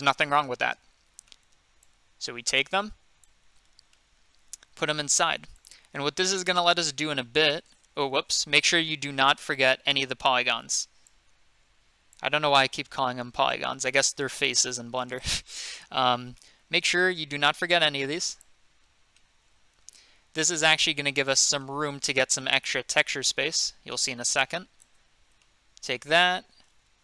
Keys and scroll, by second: 4.7 g, 8.1 ctrl+z, 14.2 g, 19.8 g, 26.6 g.